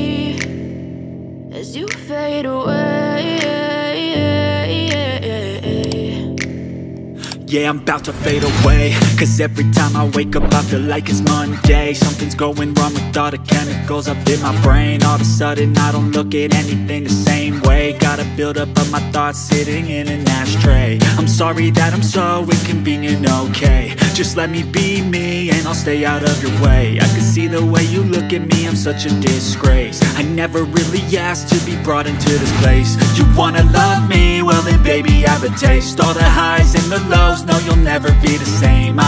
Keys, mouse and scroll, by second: 0.5 click, 2.4 click, 5.0 click, 6.2 click, 7.2 click, 8.2 click, 8.8 scroll up 1, 9.5 scroll down 1, 10.6 scroll up 1, 11.4 ctrl+o, 13.3-13.6 scroll down 1, 14.0 click, 14.9 click, 17.2 click, 18.5 click, 20.1 F4, 21.9 F9, 24.0 click, 27.1 click, 30.6 click, 31.0 double click, 32.5 double click, 33.6 click, 36.4 click, 36.7 double click, 37.5 click.